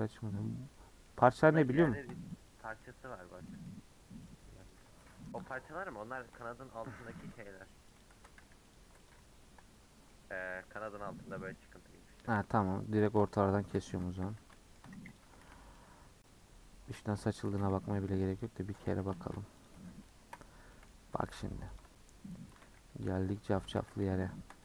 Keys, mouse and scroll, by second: 0.7-1.6 middle drag, 1.6-1.9 scroll down 3, 1.9 shift+middle click, 2.5 click, 2.8 middle click, 3.3 scroll down 2, 3.5 middle click, 3.8-4.3 scroll up 2, 4.3 Left, 4.7 Left, 5.5 KP_Decimal, 6.1-6.6 middle drag, 6.6 Tab, 7.1 a, 8.0 u, 8.1 Tab, 8.4 h, 9.1 click, 9.4 KP_Decimal, 9.7-10.1 scroll down 4, 10.1-10.9 middle drag, 10.9 scroll up 4, 11.1 Tab, 11.3 middle click, 11.5-12.1 scroll up 6, 12.1 middle click, 12.2 2, 12.6 alt+click, 13.1 scroll down 1, 13.3 shift+middle click, 13.9 Tab, 14.3 h, 14.5-15.2 shift+middle drag, 15.2 click, 15.4 Tab, 15.6 middle click, 15.8-17.1 scroll up 2, 17.1 alt+click, 17.5 a, 18.4 u, 18.6 Tab, 18.9 h, 19.1-19.6 shift+middle drag, 19.6 click, 20.2 KP_Decimal, 20.7 middle drag, 21.0 Tab, 21.8 alt+click, 22.5 a, 23.4 u, 23.5 Tab, 23.8 h, 23.9 scroll down 3, 24.0 shift+middle click.